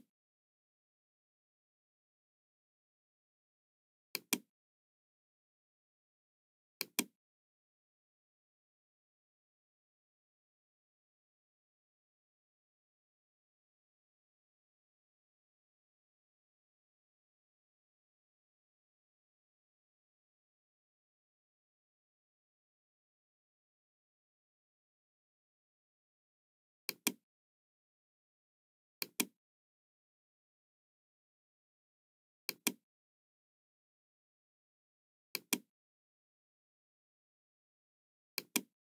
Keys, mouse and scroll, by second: 0.4-2.8 middle drag, 4.1 click, 6.7 click, 8.1-8.5 scroll up 1, 8.8-9.1 scroll down 1, 10.0 scroll up 1, 10.5 middle click, 26.7 click, 28.9 click, 32.4 click, 35.2 click, 38.3 click.